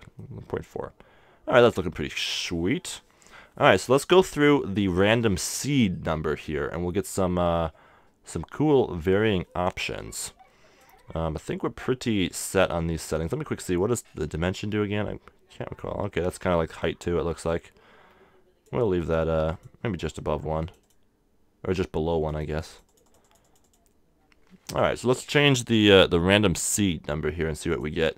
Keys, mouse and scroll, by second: 0.2-2.2 middle drag, 3.1-7.5 middle drag, 7.5-9.4 drag, 12.5-14.8 middle drag, 14.2-15.9 drag, 19.5-25.9 drag, 27.7-28.1 drag.